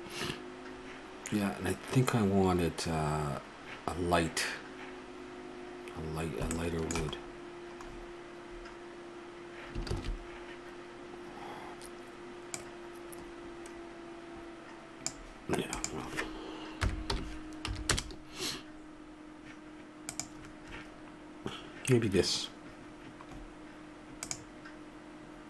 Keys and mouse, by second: 6.2-7.2 middle drag, 10.2 shift+z, 12.6-15.2 drag, 15.8-17.6 drag, 20.1-23.3 drag, 23.3 middle click, 24.2-25.4 drag.